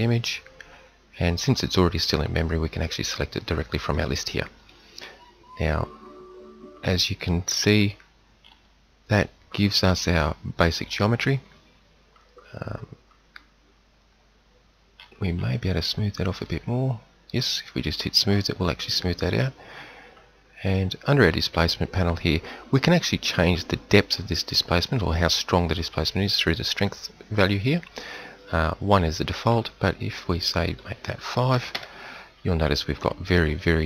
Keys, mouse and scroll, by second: 18.1-19.7 middle drag, 25.3-28.8 middle drag, 30.6-31.8 middle drag, 32.9 middle click.